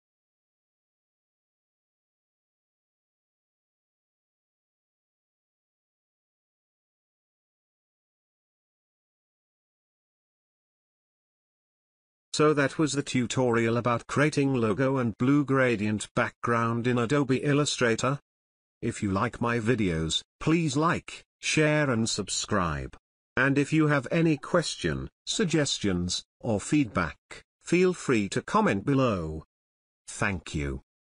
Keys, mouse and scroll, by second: 1.3 space, 1.5 ctrl+alt+click, 2.0-2.6 click, 2.6 ctrl+click, 3.4-4.1 click, 4.7-5.9 drag, 6.7-7.6 drag, 10.9 space, 11.2 ctrl+click, 12.7 click, 13.1 space, 13.2 click, 13.6 ctrl+space, 13.7 ctrl+click, 14.4-14.7 click, 15.7 click, 19.6-20.9 drag, 20.3 click, 29.2 click.